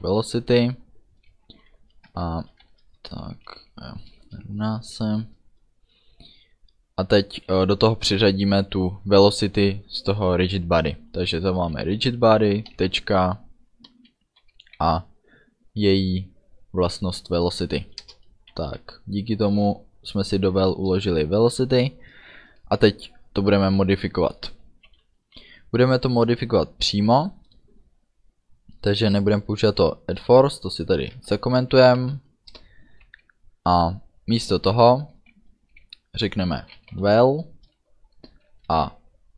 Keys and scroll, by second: 1.6-4.3 typing, 11.8 r, 12.8 ', 14.7 e, 18.1 Return, 18.8 ů, 25.2 Down, 31.2 -, 32.1 End, 32.6 Return, 36.7 v, 36.8 e.